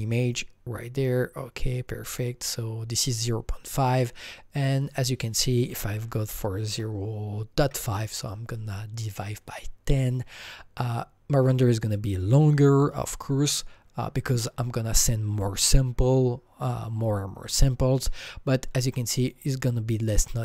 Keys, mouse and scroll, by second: 0.2 click, 0.2 KP_Enter, 0.2 click, 2.1-5.9 drag, 5.7-8.4 typing, 8.4 Return, 9.9 click, 18.8 Return, 18.8 click, 18.8 KP_5, 18.8-20.1 scroll up 7, 20.1-20.4 scroll up 2.